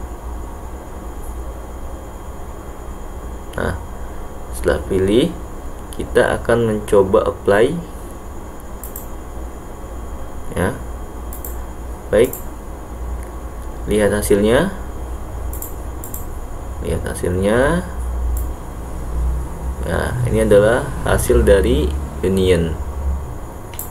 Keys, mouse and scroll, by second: 8.9 click, 12.3 click, 15.6 click, 16.1 click, 18.5-23.9 drag.